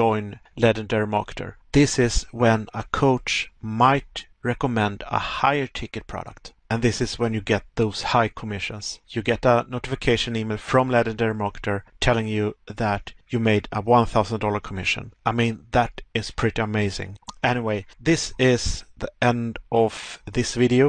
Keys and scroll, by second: 1.0 Pause, 5.9 Pause, 8.4 Pause, 10.9 Pause, 20.2 Pause.